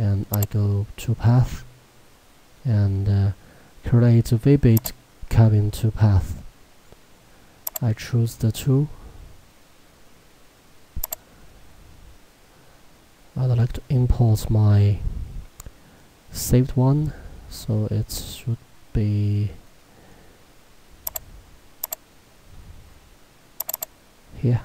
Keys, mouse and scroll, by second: 4.8 click, 7.7 click, 8.7-9.5 scroll down 1, 11.1 click, 13.5-14.9 scroll up 1, 17.3 scroll down 1, 17.3-17.7 scroll up 1, 20.2 scroll down 1, 20.5-21.1 scroll, 21.1 click, 22.5-23.7 scroll, 23.7 click.